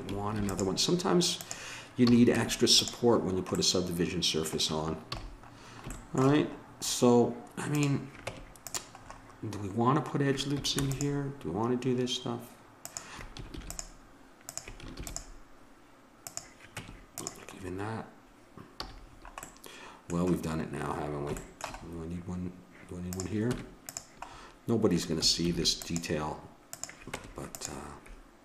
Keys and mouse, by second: 0.4 ctrl+r, 2.1 a, 2.4 Tab, 5.0 a, 7.7-8.7 drag, 8.2 Tab, 10.7 ctrl+r, 13.5 ctrl+r, 14.9 ctrl+r, 16.8 Tab, 18.8 a, 23.0-24.3 drag, 23.5 Tab, 25.4 ctrl+r, 27.2 Tab.